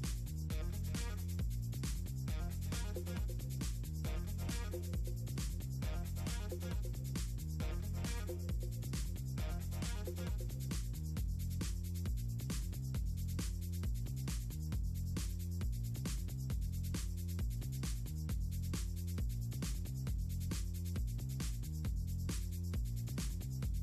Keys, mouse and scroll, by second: 0.9-1.3 scroll down 4, 1.7 click, 2.4 click, 2.6 click, 2.9 click, 3.6 ctrl+v, 3.9 ctrl+v, 4.1 ctrl+v, 4.3 ctrl+v, 4.9 click, 6.5 Return, 7.0 click, 9.9 click, 10.9 click, 11.1 click, 11.4 h, 12.4 click, 13.2 click, 14.7 click, 15.5 click, 17.1 scroll up 2, 17.5 click, 18.2 click, 22.1 click, 23.1 scroll up 2.